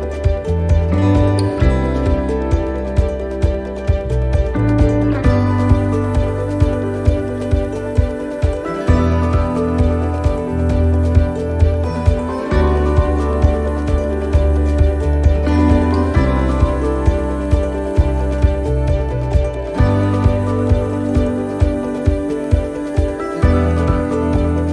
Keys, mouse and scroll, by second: 0.2 shift+middle click, 1.8 right click, 2.9 l, 3.9 click, 6.8 middle click, 7.4-7.8 scroll up 1, 8.1 shift+middle click, 8.4-8.9 shift+scroll down 2, 9.8 middle click, 12.3 scroll down 1, 13.7 click, 15.1 middle click, 15.9-16.2 scroll up 1, 16.6 middle click, 17.6 right click, 17.9 middle click, 18.9 shift+right click, 19.5 shift+right click, 20.9 shift+right click, 21.7 middle click, 22.3 shift+middle click, 22.7-23.2 scroll up 1, 23.6 shift+right click.